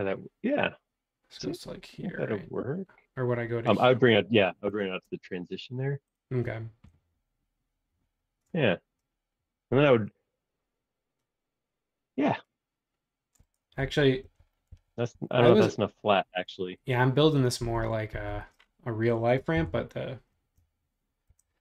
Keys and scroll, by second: 5.1 space, 13.8 super+z, 14.2 super+z, 14.7 super+z, 15.1 super+z, 17.6 super+z, 18.1 super+z, 19.5 l, 21.3 shift+s.